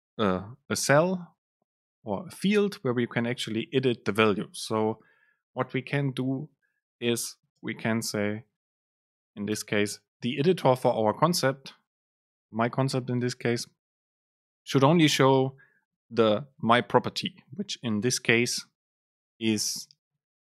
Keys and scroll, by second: 7.7 super+space.